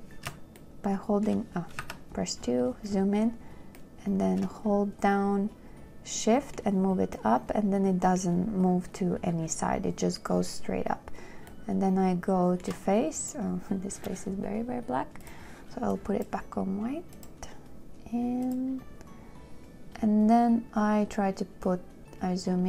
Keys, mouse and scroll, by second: 0.0 shift+2.